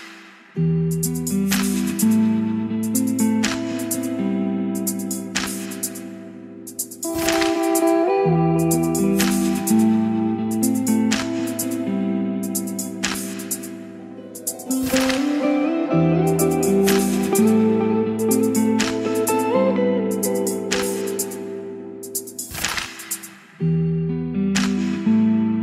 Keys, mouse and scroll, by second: 6.6 Return, 7.8-19.7 drag, 19.7 Return, 22.2-25.6 drag.